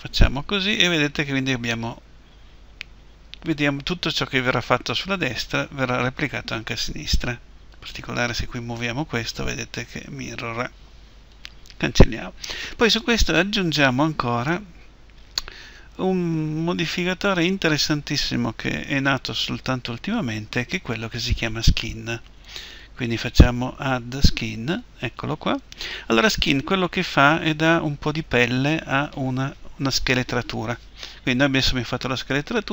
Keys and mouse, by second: 7.7-11.3 right drag, 8.6 g, 11.4-15.6 right drag, 22.8-32.7 drag.